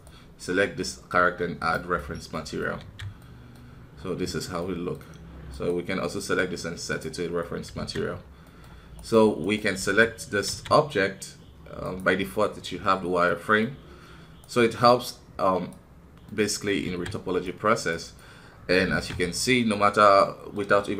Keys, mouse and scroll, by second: 1.6 click, 2.3 middle click, 2.8 alt+a, 3.2 middle click, 3.9-4.6 scroll down 1, 4.6 middle click, 5.0 scroll up 2, 5.5-7.4 right drag, 7.4 middle click, 7.7 alt+a, 8.1-8.4 scroll up 2, 8.4 middle click, 9.4 right click, 9.8 Tab, 10.7-13.6 middle drag, 13.6 scroll up 2, 14.4-15.6 right drag, 16.2-18.9 middle drag, 18.9 alt+a, 19.3-20.9 middle drag.